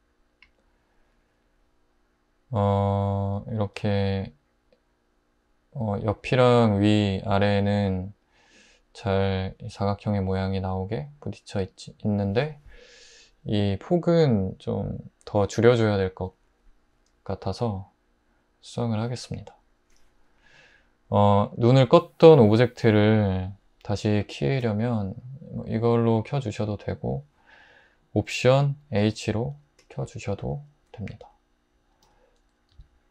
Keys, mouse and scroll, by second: 29.0 alt+h, 32.0 `, 32.7 Tab.